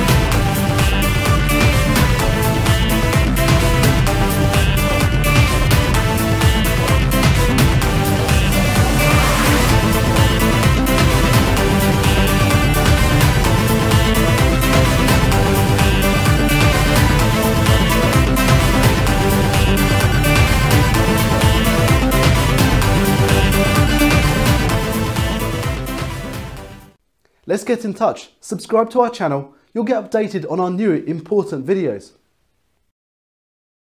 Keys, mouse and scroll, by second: 2.7 click, 3.9 click, 4.0 click, 9.5 click, 16.8 click.